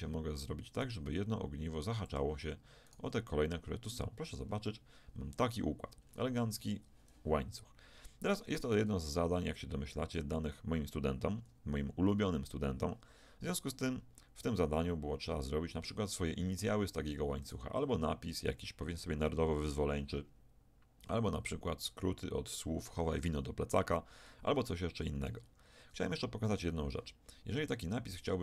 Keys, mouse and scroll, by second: 1.0 g, 2.9 click, 3.0 g, 4.4-5.6 drag, 5.6-8.2 middle drag, 8.4 Tab, 14.2-16.6 middle drag, 17.4-19.6 right drag, 24.2 shift+click, 24.4 middle click.